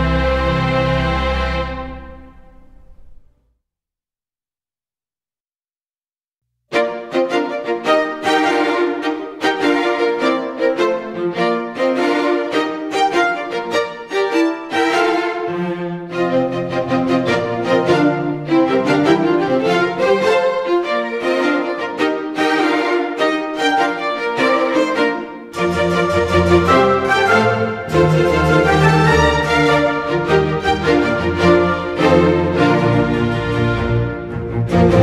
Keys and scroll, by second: 4.3 Delete, 4.7 ctrl+d, 5.4 Escape, 7.8 space, 8.9 space, 11.0 space, 23.1 space, 30.7 Delete, 31.1 ctrl+d, 32.8 Delete, 33.3 space.